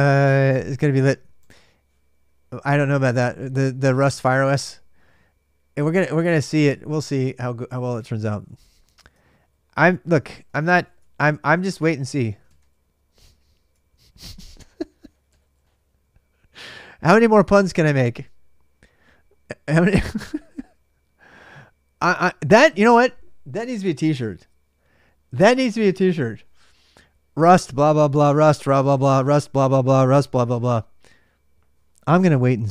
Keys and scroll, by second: 7.5-9.0 typing, 9.0 ctrl+a, 9.1 ctrl+a, 10.2-14.1 typing, 14.1 ctrl+a, 14.3 ctrl+a, 19.3-32.7 typing.